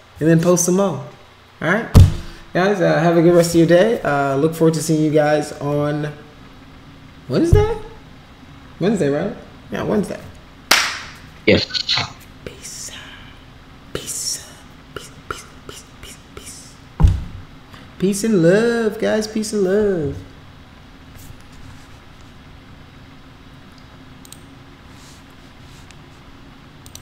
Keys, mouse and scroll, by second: 24.2 click, 26.8 click.